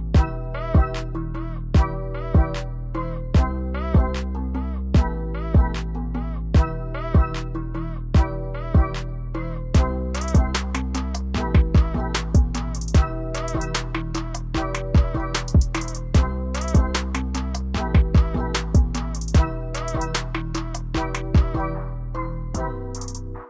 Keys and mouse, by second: 7.1 g.